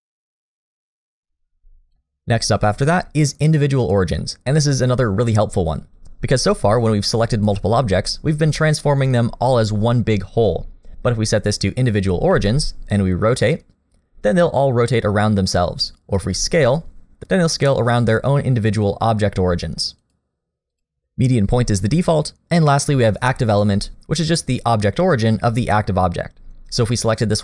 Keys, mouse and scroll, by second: 1.9 click, 5.3-6.0 scroll up 2, 12.3 r, 16.2 s, 20.7 click, 24.8 shift+click.